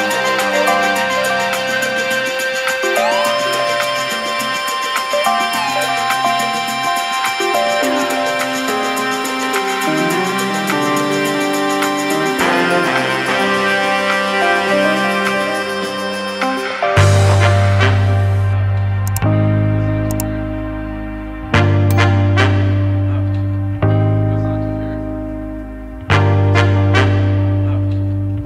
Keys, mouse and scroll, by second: 1.3 KP_3, 1.7 g, 3.1 e, 4.1 g, 5.1 r, 7.0 scroll down 1, 7.2 middle click, 8.0 scroll up 2, 8.3 middle click, 9.3 middle click, 9.7 scroll up 1, 9.9 ctrl+z, 10.0-10.6 ctrl+z, 10.8 ctrl+z, 10.9 ctrl+z, 11.4 shift+click, 11.9 KP_1, 12.4 e, 13.7 KP_3, 14.5 g, 16.2-16.5 scroll down 1, 16.5 r, 17.3 e, 19.9 r, 20.8-22.0 middle drag, 22.0 KP_1, 22.6 KP_3, 23.1 shift+middle click, 23.3-23.6 scroll down 1, 23.6-24.3 scroll up 1, 24.3 ctrl+r, 25.5 middle click, 26.1-26.5 scroll up 2, 26.5 shift+middle click, 27.2 3, 27.3 click, 27.5 shift+click, 28.0 KP_3.